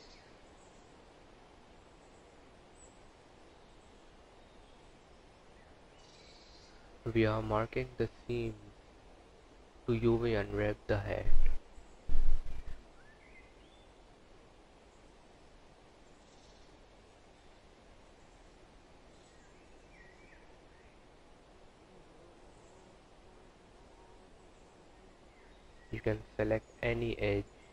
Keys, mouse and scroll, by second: 0.2 click, 1.2 click, 3.3 Tab, 3.8 click, 5.1 h, 6.0 click, 6.8 Tab, 7.7 3, 8.0 click, 12.3 u, 14.9 click, 17.2 2, 18.5 alt+click, 20.4 scroll down 2, 22.5-23.0 scroll up 2, 23.6 alt+click, 24.1 alt+click, 26.3 alt+click.